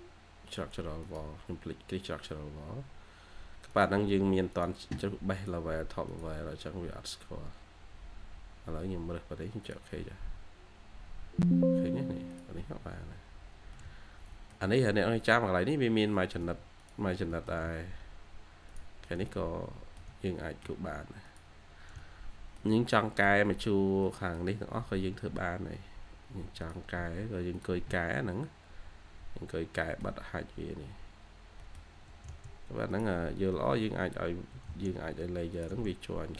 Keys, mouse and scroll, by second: 12.6-12.9 scroll down 1, 13.6 middle click, 14.4-14.8 shift+scroll down 1, 14.9 scroll up 1, 16.0 Escape, 16.3 Escape, 17.0-18.0 scroll down 3, 17.1-18.5 typing, 17.2 middle click, 19.1 middle click, 20.2 middle click, 21.5 scroll down 1, 22.8 middle click, 23.9 middle click, 24.0 scroll down 1, 25.1-26.1 scroll down 1, 28.3-28.7 scroll up 1, 29.4 scroll down 1, 29.7 middle click, 30.2-31.3 scroll up 1, 31.3 scroll down 1, 31.5 middle click, 32.0 typing, 33.4 Escape, 33.7-34.3 scroll up 1, 34.4 1, 35.9-36.2 scroll down 1, 36.2 1.